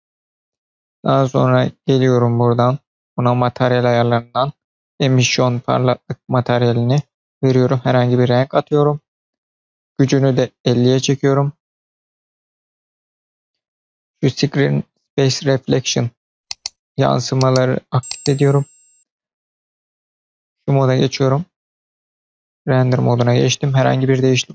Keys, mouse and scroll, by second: 0.0 click, 1.4 click, 4.2-5.5 drag, 6.8 click, 9.3-10.9 drag, 16.3 click, 19.1 click, 21.0 click, 23.7-24.4 middle drag.